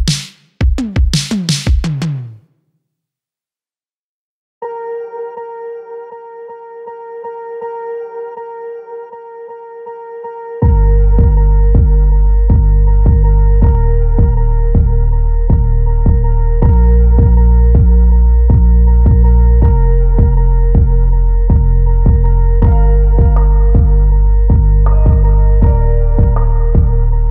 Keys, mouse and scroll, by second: 0.4 click, 0.9-1.4 middle drag, 1.7 shift+middle drag, 2.6 click, 4.0 click, 7.4 click, 7.6-10.5 drag, 9.9 s, 11.6-17.9 drag, 19.3-24.0 drag, 24.1-27.3 drag.